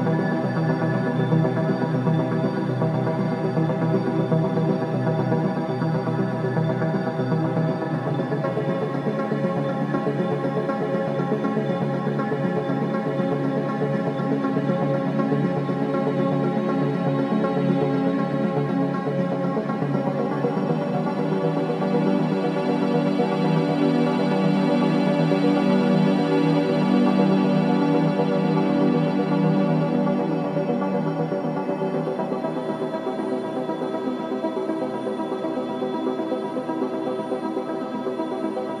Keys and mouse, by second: 0.2-1.6 alt+drag, 2.5 alt+click, 4.4 k, 5.3 click, 7.0 click, 7.9 Return, 8.6-11.2 alt+drag, 11.4 j, 12.2-13.6 alt+drag, 13.7 click, 14.6 alt+shift+click, 15.1 shift+click, 15.9 g, 16.3 z, 17.2 alt+click, 17.3 typing, 22.0 alt+click, 22.3-24.5 typing, 23.1 alt+click, 24.8-27.2 alt+drag, 26.2-26.9 typing, 27.7-29.1 alt+drag, 28.3-29.0 typing, 30.4-32.4 typing, 31.7 click, 32.0-34.9 alt+drag, 34.2-35.7 typing, 36.6 alt+click, 37.2-38.8 alt+drag.